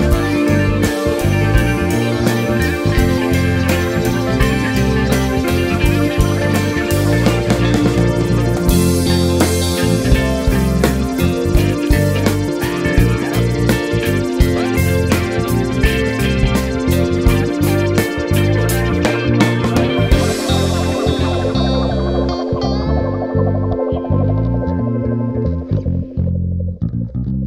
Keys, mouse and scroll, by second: 0.4 scroll down 2, 0.5 `, 3.9 scroll up 1, 4.1 scroll down 1, 4.4 click, 6.0-10.6 drag, 10.2-10.6 scroll up 1, 11.0 KP_Decimal, 11.3 scroll up 1, 11.4 `, 12.1-15.7 drag, 15.7 alt+a, 17.8-18.5 scroll down 1, 18.5 g, 19.0 click, 19.1 s, 19.5 click, 19.6-20.0 scroll up 1, 20.1 g, 20.4 click, 20.9 ctrl+2, 21.8 alt+a, 21.8 right click, 22.1 click, 23.1-25.5 drag, 25.5 Tab, 26.0 `, 26.6 alt+click, 27.0 alt+shift+click, 27.2 `.